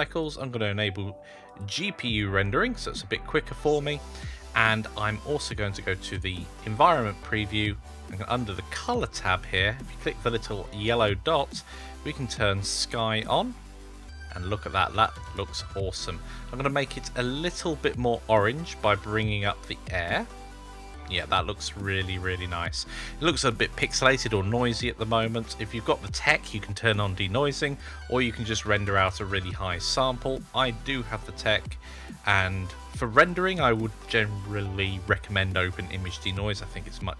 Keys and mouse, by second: 1.3-2.1 drag, 5.5 click, 8.7-9.9 drag, 10.5-12.6 drag, 17.2-20.8 drag, 29.1 click, 30.9 click, 33.0 click, 33.4-35.9 drag.